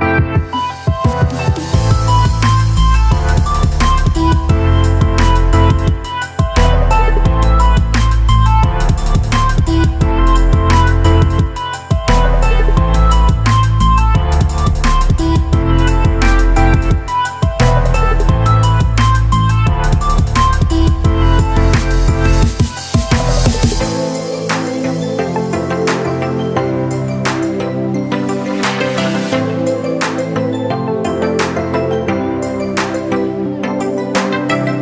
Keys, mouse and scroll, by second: 2.5-9.6 shift+drag, 10.3 space, 10.6 click, 10.8 space, 11.4-15.6 alt+drag, 15.6 ctrl+t, 16.6-17.9 shift+drag, 17.9 ctrl+z, 18.9-22.0 shift+drag.